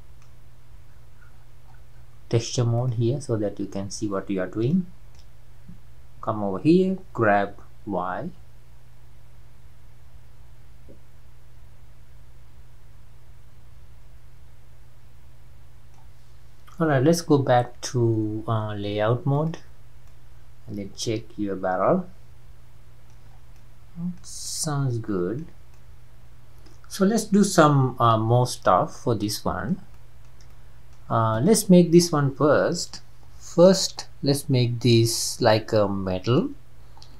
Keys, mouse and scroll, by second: 4.7-7.3 middle drag, 14.9-19.6 middle drag, 19.6 click, 20.1-23.1 middle drag, 23.3-23.6 scroll down 3, 23.6-28.9 middle drag, 28.9-29.2 scroll up 1, 29.2-31.5 middle drag, 31.5 click.